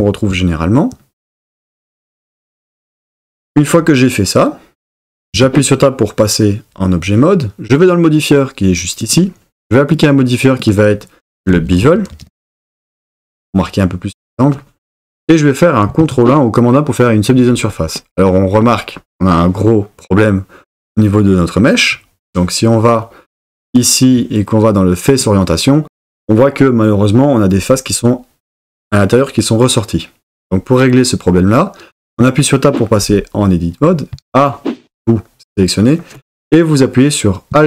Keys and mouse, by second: 5.4 Tab, 9.9-12.8 drag, 16.0 super+1, 23.8-25.5 drag, 32.1 Tab, 34.1 a.